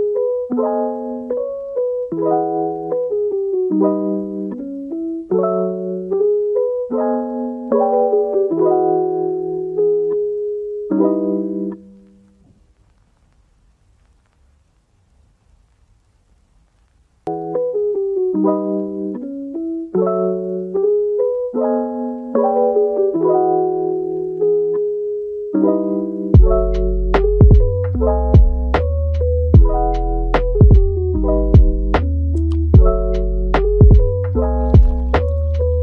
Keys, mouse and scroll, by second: 1.3 click, 1.7-7.9 middle drag, 7.9 shift+d, 8.8-9.5 middle drag, 9.5 f, 10.8 g, 11.5-11.9 middle drag, 11.9 r, 12.7 middle click, 13.1 g, 14.1-14.6 middle drag, 14.6 g, 15.9-16.6 middle drag, 16.6 r, 19.1 middle click, 19.7 g, 21.8-22.2 middle drag, 22.2 r, 23.6 middle click, 24.4 Tab, 25.3 g, 26.3 alt+s, 27.2 click, 27.6 alt+s, 28.3 click, 28.6 alt+s, 30.2 middle click, 31.1 click, 31.7 g, 32.6 click, 32.9 g, 33.7 click, 34.1 g, 34.7-35.7 middle drag, 35.7 g.